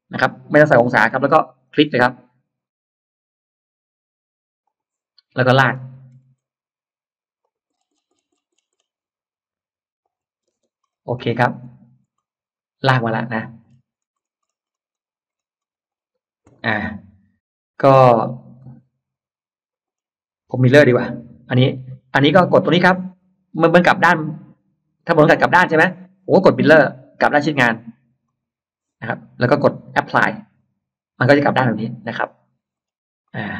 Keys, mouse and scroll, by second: 0.6 BackSpace, 4.5 click, 5.3 scroll up 1, 5.8-6.5 scroll up 2, 7.3 click, 7.5-8.7 scroll down 3, 9.9 click, 10.5 space, 10.7-11.0 scroll up 1, 11.5-11.8 scroll down 1, 12.0-13.5 middle drag, 13.6 scroll down 1, 14.0-16.1 scroll up 5, 16.6-16.9 scroll up 1, 18.4-19.7 middle drag, 22.7 click, 28.1 click, 30.4 click, 31.9-32.5 scroll up 2, 32.7 scroll down 2, 33.1 middle click.